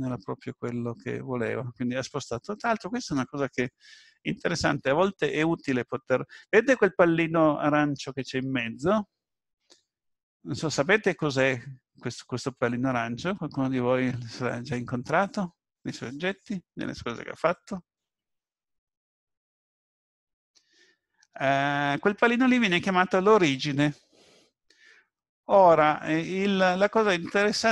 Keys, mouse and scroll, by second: 0.1 ctrl+z, 0.5 ctrl+z.